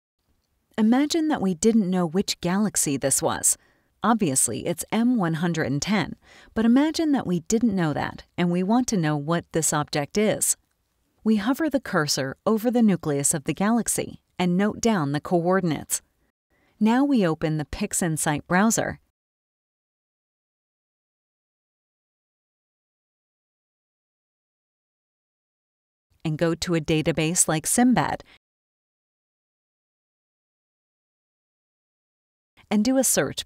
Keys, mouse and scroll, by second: 0.0 space, 0.2-1.2 scroll up 2, 10.4 click, 24.0-25.5 drag, 26.4 click, 27.6-31.0 typing, 31.1 Return.